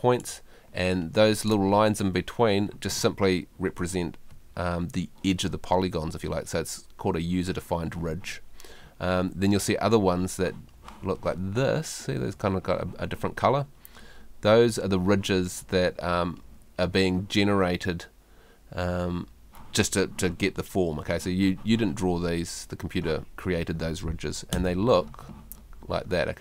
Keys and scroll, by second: 24.5 F3.